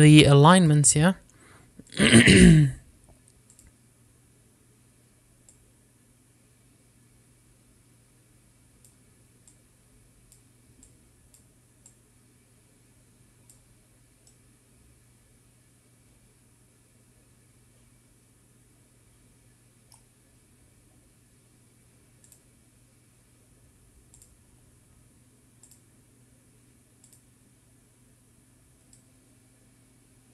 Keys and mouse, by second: 3.1-4.8 drag, 6.7-10.1 drag, 10.8 click, 12.0 click, 13.2-14.8 drag, 15.5-22.8 middle drag, 23.5 click, 25.4 click, 27.0-28.4 drag, 30.2-30.3 drag.